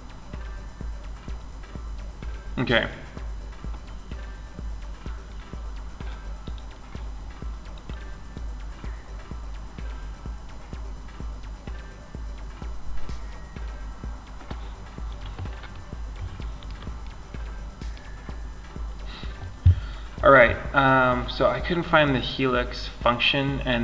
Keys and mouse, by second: 5.6-11.6 drag, 15.2-22.3 middle drag.